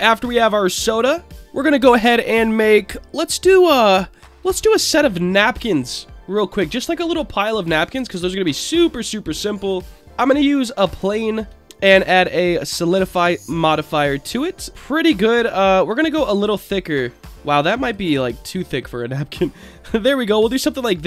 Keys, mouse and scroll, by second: 1.3 click, 3.6-4.2 shift+middle drag, 4.5-5.4 scroll down 1, 5.4 click, 5.7-6.3 scroll down 2, 6.3-6.9 drag, 7.2-7.6 scroll up 1, 8.1 shift+a, 10.5-11.0 scroll up 3, 11.1 shift+middle drag, 11.6-12.1 scroll up 2, 12.2 click, 12.9-14.7 drag, 14.7 middle click, 16.1 click, 16.3 click, 16.5 click, 17.8 click, 18.0 click, 20.0-20.8 drag.